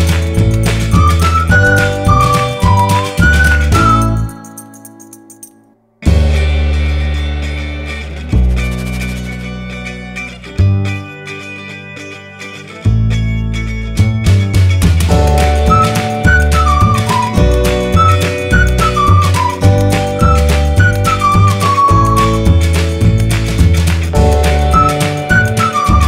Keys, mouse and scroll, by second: 0.1 F4, 0.4 click, 2.4 F4, 2.6 click, 2.8 F4, 3.2 click, 5.0 F4, 5.2 click, 7.2 ctrl+g, 8.0 click, 9.0 Down, 9.2 Down, 11.3-19.9 drag, 21.0 ctrl+g, 22.6 click, 25.0 Down, 25.2 Down, 25.6 typing.